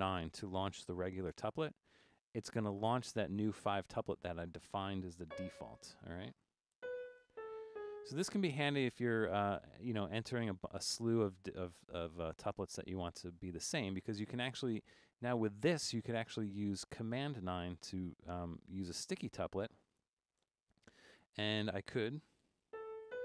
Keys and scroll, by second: 1.4 9, 5.3 c, 6.6-7.7 typing, 20.4 super+9, 22.8-23.2 typing.